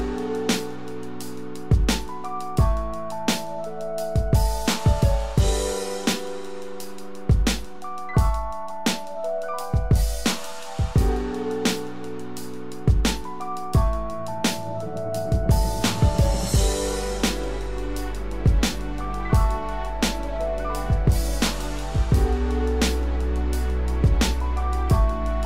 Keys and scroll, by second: 8.7 ctrl+z, 19.3 ctrl+d.